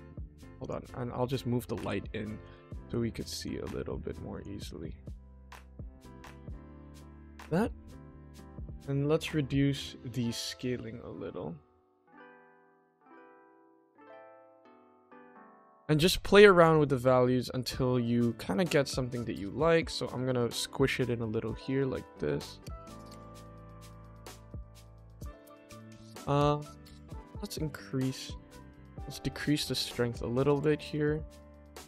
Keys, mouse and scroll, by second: 0.0-0.5 scroll down 1, 0.5 click, 1.2 KP_1, 1.8 g, 2.7 r, 3.7 g, 4.7 middle click, 5.0-5.4 scroll up 2, 5.4 middle drag, 6.2 click, 7.0 middle click, 9.3 scroll up 1, 10.5-11.6 drag, 11.9 click, 12.1 click, 12.4 click, 13.7 click, 14.6 click, 15.0 click, 16.5 click, 16.7 click, 19.7 click, 19.8 click, 21.5 click, 23.4-24.0 middle drag, 25.6-26.0 middle drag, 26.7 middle drag, 27.1 middle click, 27.5 middle click, 28.7-29.7 drag, 30.6 click.